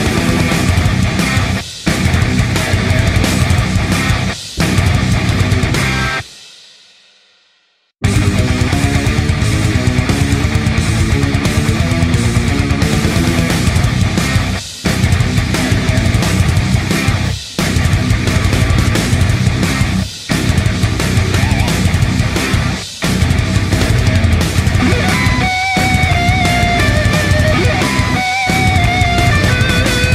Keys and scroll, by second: 1.5 ctrl+alt+a, 10.7 p.